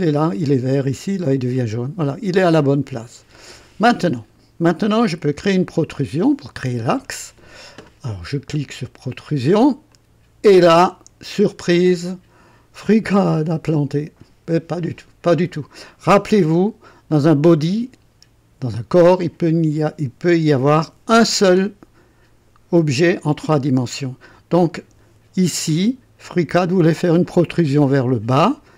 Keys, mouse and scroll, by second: 3.4 scroll down 1, 4.9 click, 5.8 right click, 9.9 click.